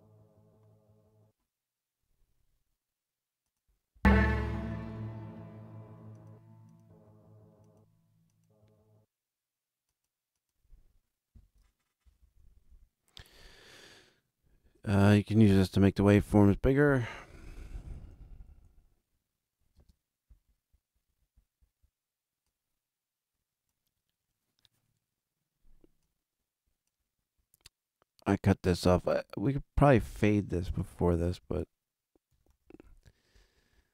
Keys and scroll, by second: 11.9 alt+super+], 17.8 alt+super+], 20.1 super+space, 30.7 ctrl+Up, 32.2 ctrl+t.